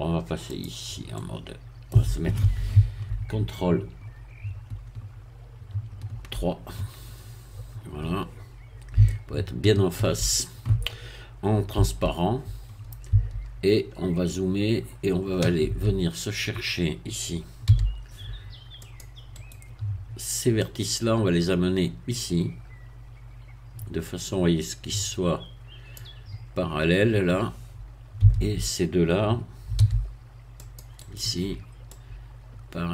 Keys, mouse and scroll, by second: 0.5 click, 1.1 middle click, 5.7 ctrl+3, 7.4-8.1 scroll up 2, 8.1-8.9 scroll up 1, 9.1-10.6 shift+middle drag, 11.7 z, 13.1 a, 13.7-14.3 scroll up 2, 14.7 scroll up 2, 17.7 c, 18.8 click, 19.4 right click, 20.6-26.1 drag, 28.2 a, 29.7 c, 30.6 click, 31.1 right click, 31.9-32.9 drag.